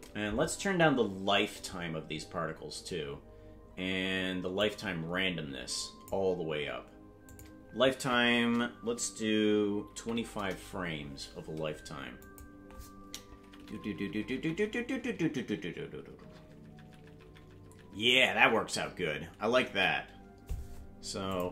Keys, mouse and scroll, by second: 0.2 Right, 0.4 Right, 0.8 Right, 1.1 Right, 1.5 Right, 1.6-2.3 scroll up 9, 4.5-6.0 drag, 7.2-10.9 drag, 12.2 click, 13.4-18.0 Right, 18.2 Right, 18.4 Right, 18.6 Right, 19.5 Right, 21.3 click.